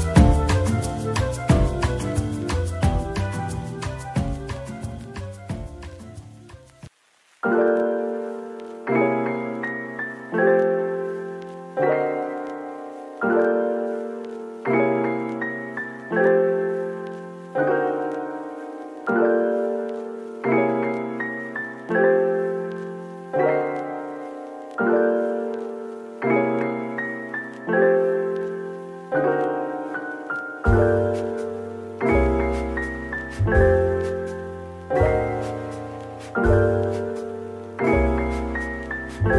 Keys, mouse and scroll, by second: 0.6 Tab, 1.7 ctrl+l, 2.1-3.1 typing, 5.2 double click, 6.8 ctrl+l, 7.5 typing, 8.7 typing, 10.7-12.0 typing, 13.9 Tab, 14.3 middle click, 15.8 Tab, 16.6 Tab, 17.1 Tab, 18.3 ctrl+l, 18.6-19.6 typing, 20.6 double click, 20.9 Tab, 21.6 Tab, 23.2 ctrl+l, 23.6-24.6 typing, 25.3 click, 25.7 middle click, 26.7 typing, 27.6 Tab, 28.0 Tab, 28.3 Tab, 28.8-29.3 scroll down 1, 29.3 middle click, 31.2 scroll down 1, 31.8 middle click, 33.3 scroll up 1.